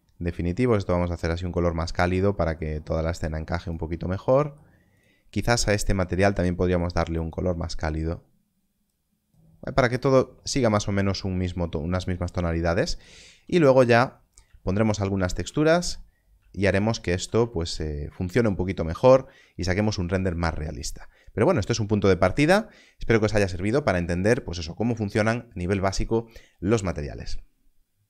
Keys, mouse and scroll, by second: 7.1 click, 13.1 click, 13.3 alt+a, 15.0 scroll up 1, 16.1 scroll up 1.